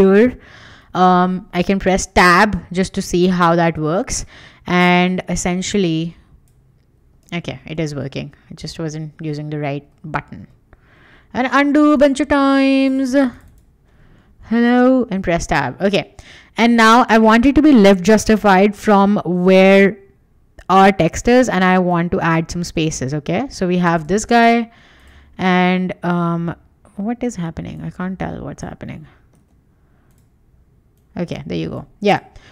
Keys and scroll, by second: 0.8 ., 1.9 Tab, 7.2 super+z, 10.9 super+z, 14.3 BackSpace, 14.8 Tab, 15.8 Escape, 24.0 super+z, 29.4 super+z.